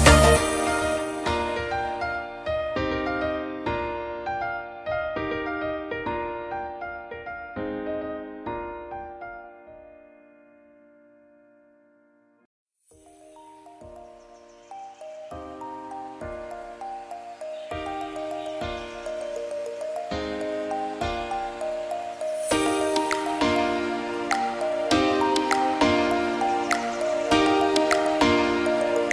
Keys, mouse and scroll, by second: 3.3 click, 5.8 click, 18.1 click, 18.3 click, 19.6 click, 20.6 click, 27.2 click, 27.8 n, 28.0 click, 28.2 scroll down 5, 28.4 click, 28.6 n, 28.9 click, 29.0 click.